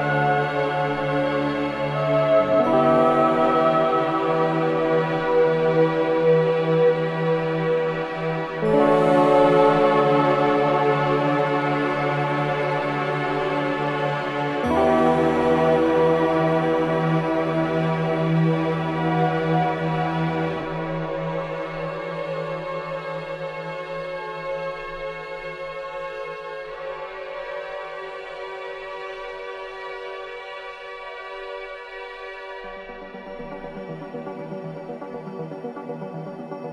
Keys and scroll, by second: 15.5 ctrl+KP_0, 18.0 alt+o, 18.3 Return, 18.5 Return, 19.1 space, 20.5 v, 28.6 ctrl+KP_0, 31.7 ctrl+KP_0, 31.9 ctrl+s.